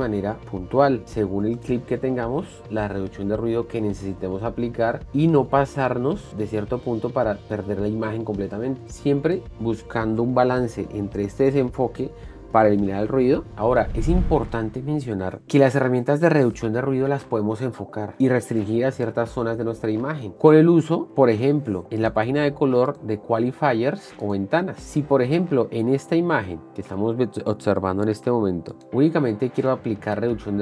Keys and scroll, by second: 21.6 shift+6.